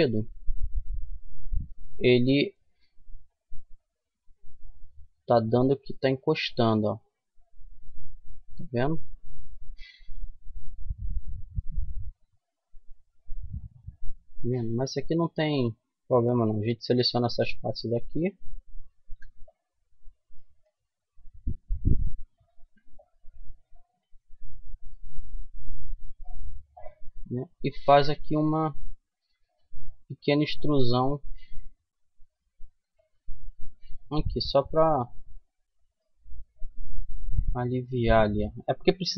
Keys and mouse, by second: 1.6-3.5 drag, 2.3 right click, 3.5-4.7 middle drag, 4.7-6.6 drag, 12.1 ctrl+z, 12.7 click, 14.3-15.6 middle drag, 15.6-19.0 right drag, 18.3 c, 19.0 middle click, 19.8 right click, 20.3 middle click, 20.9 click, 21.8 c, 23.1 click, 24.9-28.2 middle drag, 29.3 e, 32.3 Tab, 33.1-34.7 middle drag, 35.4-38.2 middle drag, 35.9 Tab, 36.6 a, 36.9 a, 38.5 w.